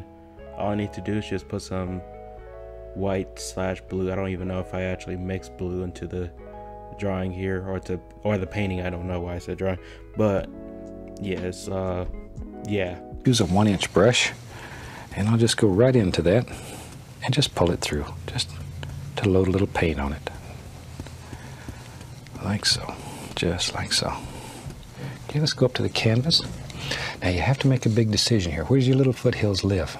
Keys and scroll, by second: 1.3 ctrl+z, 3.3 ctrl+z, 11.0 ctrl+z, 12.2 ctrl+z.